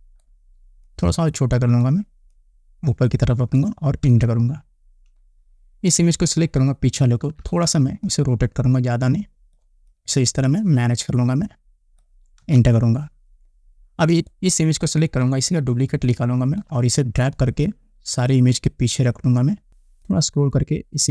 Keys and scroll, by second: 4.1 Return, 7.1 ctrl+t, 12.4 Return.